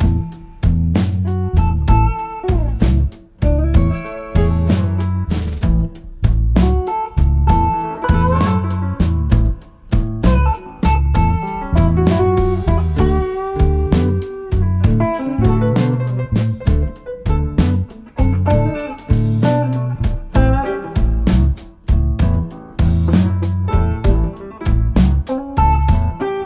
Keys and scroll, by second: 0.0-0.5 typing, 4.4-5.7 typing, 7.6-8.4 typing.